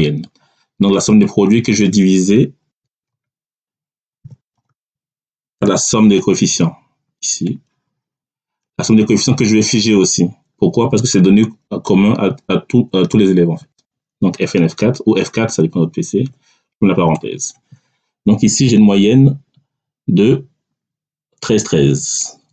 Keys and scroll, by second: 3.0-5.5 typing, 13.5 F4, 16.0 [, 17.0 Return.